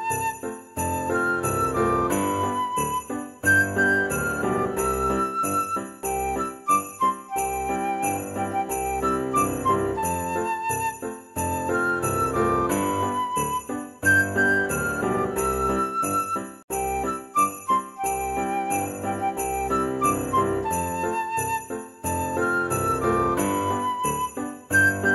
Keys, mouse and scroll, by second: 5.7 click, 6.0 click, 6.0 middle click, 6.7-8.0 drag, 9.1 click, 9.9 KP_0, 11.9-14.0 drag, 14.0 middle click, 14.5 click, 15.5-17.0 drag, 18.5 click, 19.7 click, 22.1-23.4 drag.